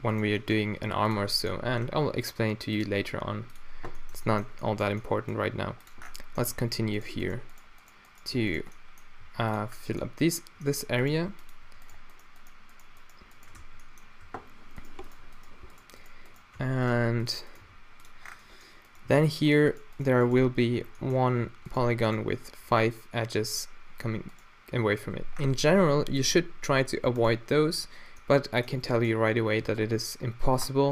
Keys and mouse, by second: 0.2-0.7 drag, 0.7 g, 1.4-2.1 middle drag, 2.1 e, 3.0 e, 4.7 middle click, 5.1 middle click, 5.4 g, 7.0-8.4 drag, 8.4 f, 8.8-9.6 drag, 9.2 g, 9.6-10.4 middle drag, 10.4-11.0 drag, 11.0-11.6 middle drag, 11.1 g, 11.6-12.0 drag, 13.6 f, 14.3 a, 16.6 f, 17.6 g, 17.8 click, 18.1 middle click, 19.1 e, 20.4 f, 21.5 a, 25.0 q, 26.8 middle click, 28.1-28.5 middle drag, 28.5 click, 28.5 middle click, 28.7 click, 28.9 middle drag.